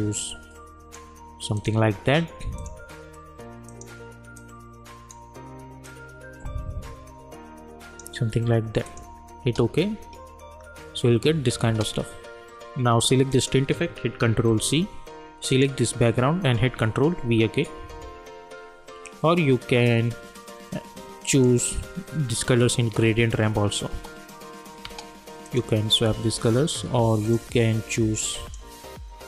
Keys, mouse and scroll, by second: 9.4 space, 11.6 space, 13.3 click, 14.4 ctrl+c, 15.5 click, 16.5 ctrl+v, 21.3 click, 23.9 space, 25.5 click.